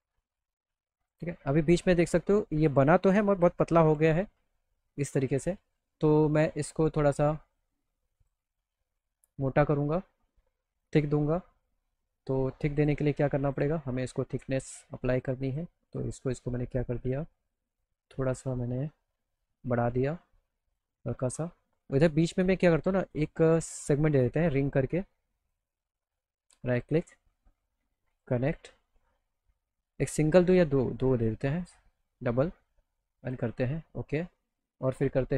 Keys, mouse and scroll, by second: 0.0 click, 0.2 alt+click, 1.0 click, 1.7 click, 3.6 F3, 4.0 F4, 4.4 F3, 5.1-6.4 alt+middle drag, 8.2 click, 10.7 click, 12.8 click, 13.5 click, 14.0 alt+middle click, 14.6 click, 15.2 ctrl+click, 15.5 ctrl+click, 15.9 click, 16.3 click, 17.0 click, 17.5 ctrl+click, 17.7 ctrl+click, 18.2 ctrl+click, 19.4-20.8 drag, 21.0 alt+middle click, 23.0 click, 24.3 click, 25.4 right click, 26.1 right click, 28.1 click, 30.0 alt+middle click, 31.6 click, 33.3 click, 33.8 alt+middle click, 34.6 alt+middle click.